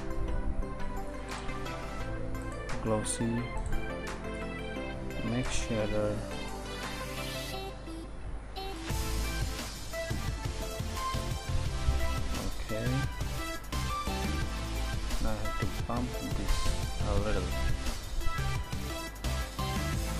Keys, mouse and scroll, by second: 4.2 shift+a, 6.5-6.9 drag, 19.6 shift+a.